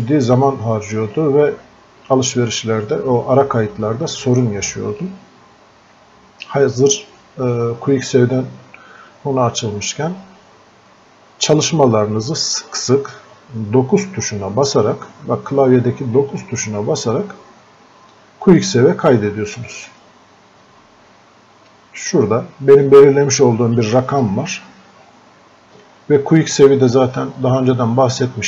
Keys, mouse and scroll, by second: 16.3 9, 19.5 click, 22.1-23.9 drag.